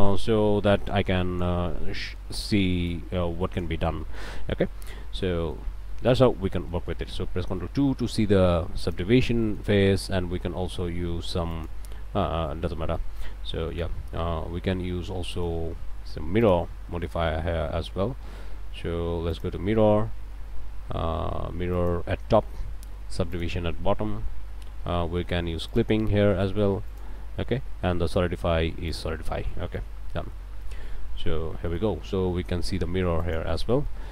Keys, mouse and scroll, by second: 0.7 click, 1.7 click, 4.0 click, 4.5 click, 4.9 Tab, 5.2 click, 5.8 Tab, 6.0 click, 6.5 Tab, 6.7 ctrl+click, 7.4 ctrl+2, 8.8 click, 9.4 click, 11.5 click, 12.5 click, 13.4 Tab, 13.7 click, 15.3 click, 16.4 click, 19.3 click, 21.7 click, 23.3 click, 25.3 middle click, 25.7 click, 26.9 click, 28.9 click, 29.5 click, 30.0 Tab, 30.3 click, 30.5 middle click, 31.2 Tab, 31.7 middle click, 33.2 middle click, 33.5 scroll up 1, 33.7 click.